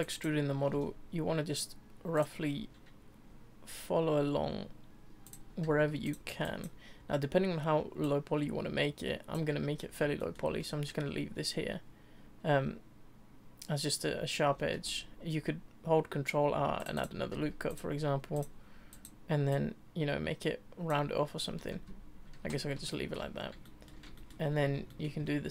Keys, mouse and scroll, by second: 0.0 click, 0.7 e, 5.2 click, 5.6 z, 6.0 click, 8.0 click, 10.2-14.7 shift+middle drag, 14.7 ctrl+r, 17.3 z, 17.7 click, 18.3 click, 18.9 click, 19.5 click, 21.3 scroll down 1, 21.7 Tab, 22.2 Tab, 22.9 shift+middle click, 23.3 scroll down 2, 23.6 shift+middle click, 24.5-24.9 scroll up 2, 24.9 shift+middle click, 25.2-25.5 scroll up 2.